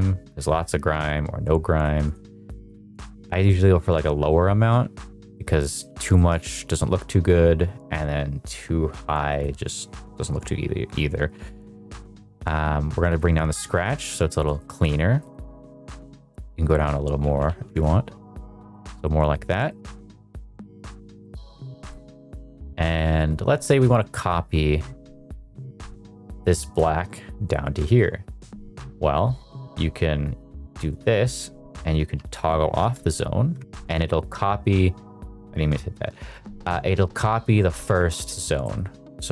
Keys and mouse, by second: 2.1 click, 3.9 click, 5.3 middle click, 5.7 middle click, 6.1-9.3 shift+middle drag, 9.3-13.1 drag, 14.3 shift+middle click, 14.5 middle drag, 15.1 middle click, 16.7-17.7 drag, 18.6 middle click, 18.9 shift+middle drag, 19.2 middle click, 19.6 shift+middle drag, 20.0 middle click, 20.5 shift+middle drag, 21.2 middle click, 21.8 shift+middle click, 27.8 middle click, 30.9-32.8 drag, 33.5 Right, 38.5 middle click.